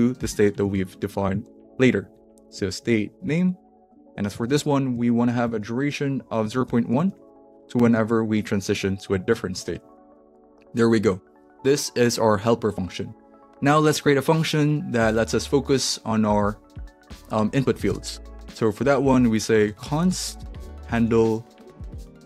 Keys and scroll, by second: 0.1-2.8 typing, 3.3 alt+Right, 4.3-9.9 typing, 17.9 Return, 19.3-22.2 typing.